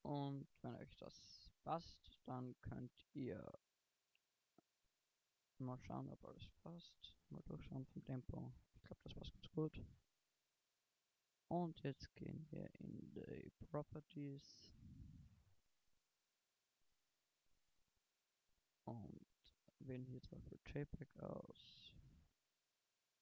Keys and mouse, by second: 2.0 alt+a, 6.4 shift+Left, 7.0 alt+a, 9.1 alt+a.